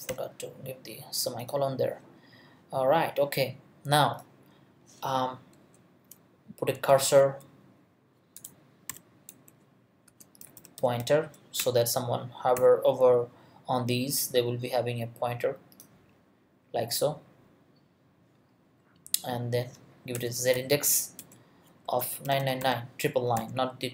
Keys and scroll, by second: 5.6 Return, 6.5-8.9 typing, 9.5 Return, 10.0-11.5 typing, 11.6 Return, 12.5 ;, 20.1 Return, 20.5 z, 21.2 Return, 21.8 space, 22.2 9, 23.3 ;.